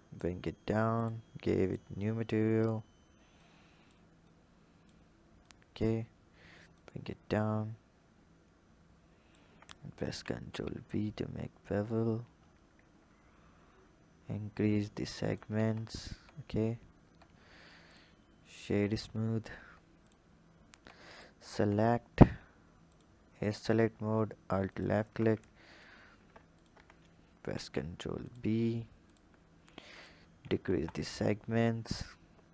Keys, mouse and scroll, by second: 1.0-2.0 drag, 2.0-3.3 scroll up 2, 3.3-6.9 drag, 10.0 ctrl+b, 15.5 Tab, 16.1 Tab, 17.0 Tab, 17.8-19.5 drag, 19.5 Tab, 19.9 click, 20.7 Tab, 21.1 click, 21.5 Tab, 22.9 click, 23.5 alt+click, 24.6 alt+shift+click, 26.5 shift+click, 27.6 ctrl+b, 29.0-30.9 drag.